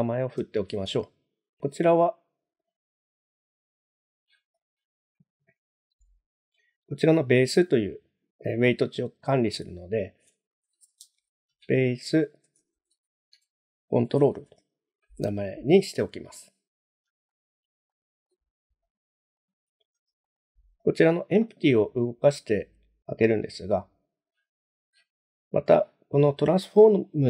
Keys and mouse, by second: 0.4 F2, 3.3 click, 4.5 click, 9.3 click, 10.0 F2, 17.3 shift+middle click, 17.9-18.3 middle drag, 18.9 click, 19.4 click, 20.3 shift+middle click, 20.8 click.